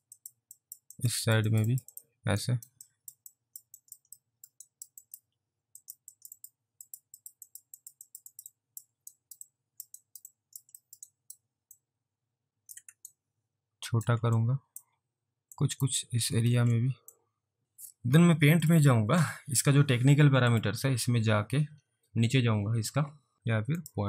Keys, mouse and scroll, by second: 0.2 click, 0.3 click, 0.6 double click, 1.0 click, 1.3 double click, 1.5 click, 1.8 double click, 2.0 double click, 2.5 alt+right click, 2.9 alt+click, 3.4 alt+click, 4.0 alt+click, 4.2 alt+middle click, 4.7 alt+right click, 5.1 alt+click, 5.9 click, 6.2 click, 6.4 double click, 6.9 click, 7.3 double click, 7.5 click, 7.9 double click, 8.1 click, 8.4 double click, 8.6 double click, 9.2 alt+right click, 9.6 alt+click, 10.1 alt+right click, 10.4 alt+click, 10.9 alt+middle click, 11.2 alt+right click, 11.9 alt+click, 13.2 ctrl+right click, 14.5 alt+click, 15.6 click, 16.5 ctrl+z, 17.2 click, 17.6 alt+click, 18.6 click, 20.5 click, 21.3-22.9 scroll down 3, 23.8 click.